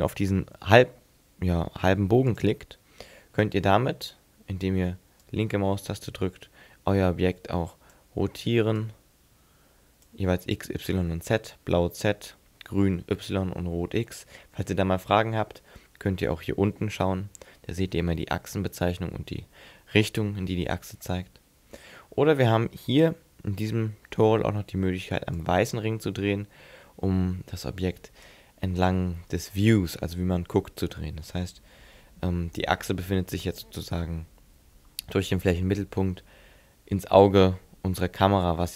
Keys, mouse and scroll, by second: 2.4 click, 5.3 click, 8.8 click, 25.4 click.